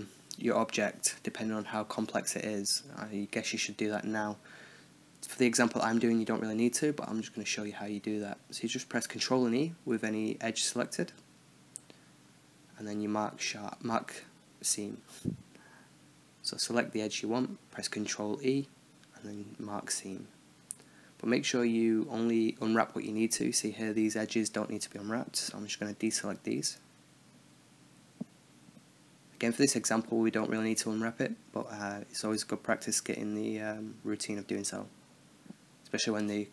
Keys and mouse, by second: 0.7 right drag, 0.9-2.0 middle drag, 2.0-5.5 right drag, 5.6-8.0 right drag, 8.0 ctrl+e, 11.0-12.0 middle drag, 12.5 KP_7, 14.1 z, 15.5 a, 16.3 b, 18.0 b, 19.0 b, 19.8 b, 20.7-21.0 middle drag, 21.8 z, 22.7 z, 23.9 KP_1, 24.2 middle click, 24.6-25.8 middle drag, 25.8 c, 31.0-33.3 middle drag, 32.1 z, 33.3 ctrl+e, 34.5-35.9 middle drag, 36.1 Tab.